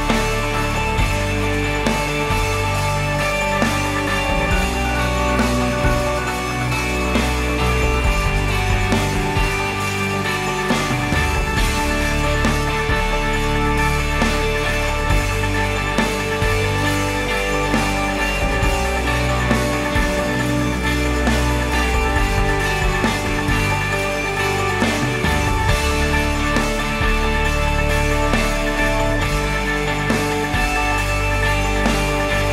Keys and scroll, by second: 11.8 ctrl+s, 24.5 shift+l, 24.8 e, 26.6 Left, 27.6 space.